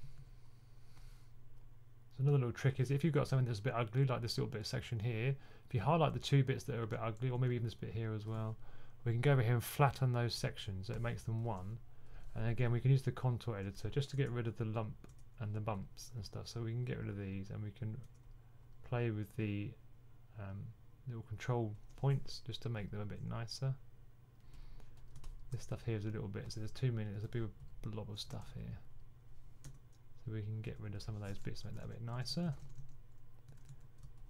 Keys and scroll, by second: 28.2 super+z, 31.5-34.2 typing.